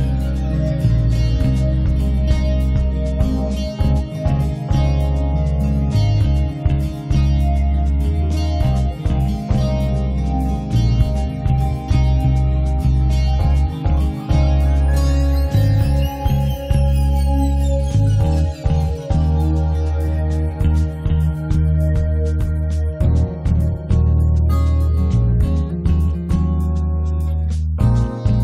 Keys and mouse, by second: 0.6 middle click, 0.6 ctrl+KP_1, 0.9 g, 1.0 f, 1.4 click, 2.1 middle click, 2.7-3.7 drag, 3.7-5.6 middle drag, 5.6 1, 5.6 f, 6.1 f, 6.3-11.4 drag, 11.9-14.2 drag, 12.6-14.7 middle drag, 12.6 right click, 14.1 right click, 14.3 click, 14.3 right click, 15.0 middle click, 15.1 click, 15.8 KP_1, 16.1 g, 16.3 f, 16.5 click, 17.1 middle click, 17.2-18.4 drag, 18.4 middle click, 18.8-20.0 drag, 19.8 1, 19.9 f, 20.2-24.5 drag, 22.2 middle click, 24.1 middle click, 24.8 middle click, 25.0 click, 25.5 click, 26.4-28.3 middle drag, 28.0 right click.